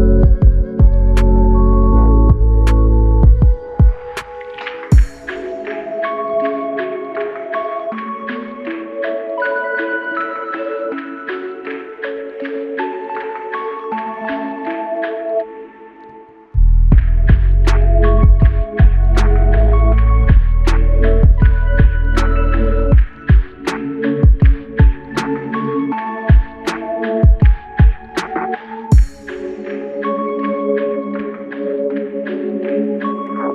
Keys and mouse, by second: 18.6 r, 27.9 f, 29.2 double click, 31.0 alt+click, 33.4 alt+shift+click.